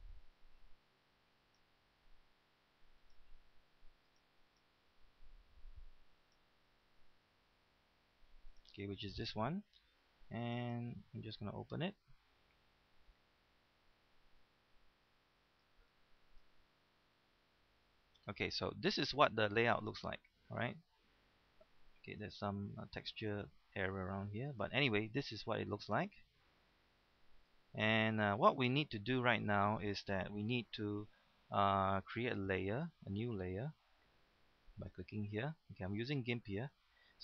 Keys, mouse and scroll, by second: 9.8 click.